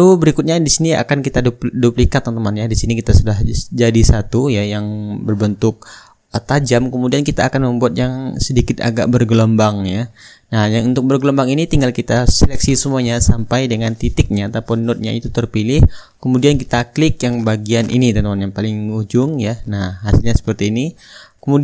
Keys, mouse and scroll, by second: 0.9-2.1 middle drag, 3.1-4.2 drag, 6.2 ctrl+d, 7.2-9.3 ctrl+drag, 10.2-11.3 drag, 11.9-15.0 drag, 18.9-20.0 middle drag, 20.0-21.1 drag.